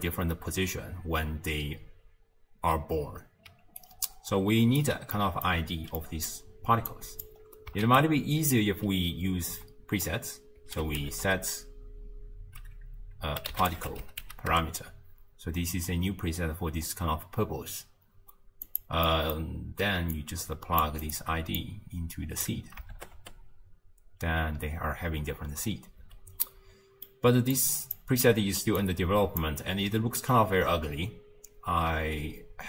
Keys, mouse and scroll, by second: 3.5 d, 3.8-4.8 right drag, 4.8 d, 5.1 d, 5.2 middle click, 5.7-6.0 scroll down 2, 6.0-6.9 middle drag, 6.9 click, 7.4-7.9 scroll up 1, 7.9 ctrl+a, 19.1-20.1 middle drag, 20.1 drag, 21.6 click, 23.0 shift+space, 26.1 space, 26.5-27.6 middle drag, 27.6 click, 28.8 click.